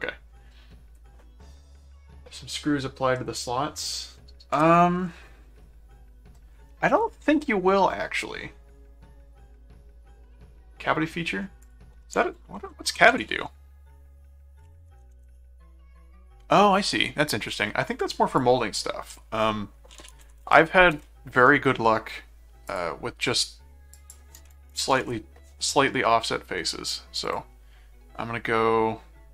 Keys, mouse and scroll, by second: 5.6 middle click, 11.6 click, 12.3-13.8 typing, 18.3 click, 19.1-20.9 typing, 20.9 Return, 22.7 click, 23.9 click, 26.7 middle click, 27.2 click.